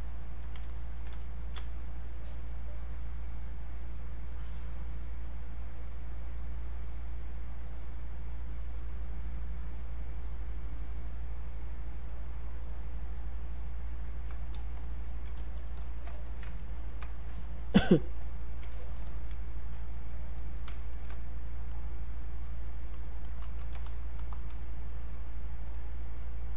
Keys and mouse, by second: 0.7 alt+click, 1.2 ctrl+right click, 2.1 click, 4.4-8.1 drag, 9.6 click, 11.9-14.8 drag, 14.8 alt+click, 15.4 q, 15.7 click, 16.6 ctrl+right click, 18.4 alt+click, 19.1 alt+click, 20.4 alt+click, 20.8 ctrl+right click, 21.7 click, 24.2 r, 25.7-26.5 alt+drag.